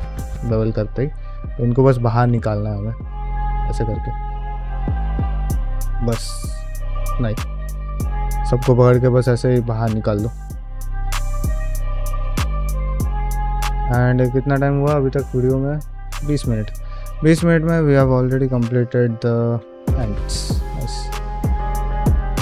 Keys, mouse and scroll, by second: 0.2 click, 0.6 g, 1.0 middle click, 1.2 shift+middle click, 1.7 click, 2.1 g, 2.6 middle click, 3.0 middle click, 3.4 click, 3.9 click, 4.3 g, 4.7 middle click, 5.1 shift+middle click, 5.5 click, 5.8 g, 6.9 middle click, 7.2 shift+middle click, 7.7 click, 8.0 g, 8.6 middle click, 8.9 shift+middle click, 9.3 click, 9.6 g, 10.0 middle click, 10.3 shift+middle click, 10.7 click, 11.2 g, 11.6 middle click, 12.0 click, 12.6 g, 12.9 shift+middle click, 13.2 middle click, 13.6 click, 13.9 g, 16.6 shift+middle click, 16.8 middle click, 17.2 click, 17.5 middle click, 17.9 g, 18.4 shift+middle click, 18.7 middle click, 19.1 click, 19.4 g, 19.8 middle click, 20.3 click, 20.6 g, 21.0 shift+middle click, 21.2 middle click, 21.7 click, 21.9 g.